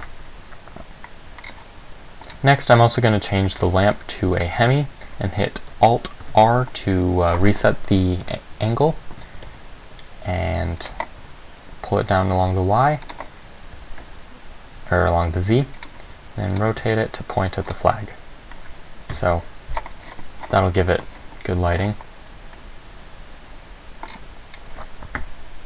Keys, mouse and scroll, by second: 0.1 Escape, 0.1-0.7 scroll down 1, 1.3 middle click, 1.6 scroll down 3, 2.5 right click, 3.7 middle click, 4.5 click, 6.4 alt+r, 8.1 KP_1, 8.4 KP_3, 9.5 g, 11.0 click, 11.3 r, 13.3 click, 13.9 g, 16.0 click, 16.2 r, 16.7 click, 16.9 g, 17.9 click, 18.1 middle click.